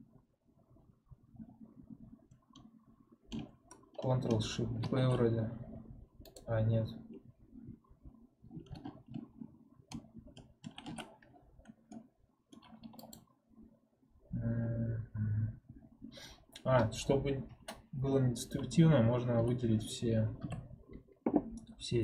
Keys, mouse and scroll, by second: 4.7 ctrl+shift+b, 10.5 ctrl+shift+r, 11.9 middle click, 12.9 click, 13.7-14.5 scroll down 2, 14.5 scroll up 2, 14.9-16.1 scroll down 1, 16.1-19.1 scroll up 1, 20.3 a.